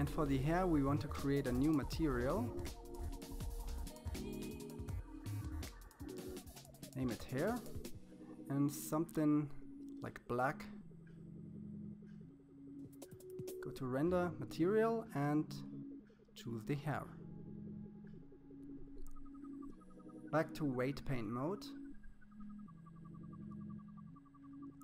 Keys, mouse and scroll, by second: 0.3 click, 1.6 click, 3.3 click, 4.2 Down, 4.5 BackSpace, 4.6 BackSpace, 6.3 click, 9.8 click, 10.7-11.0 scroll up 5, 11.0-12.1 scroll down 7, 12.3-13.5 drag, 15.4 KP_1, 16.2-17.5 shift+middle drag, 17.5-19.0 drag.